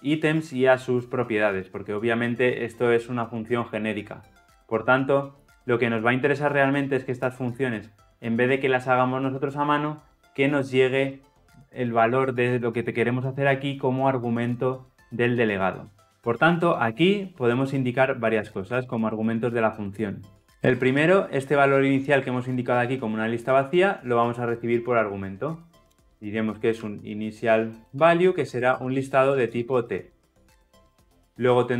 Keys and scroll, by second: 18.5 ctrl+alt+l, 18.7 ctrl+alt+o.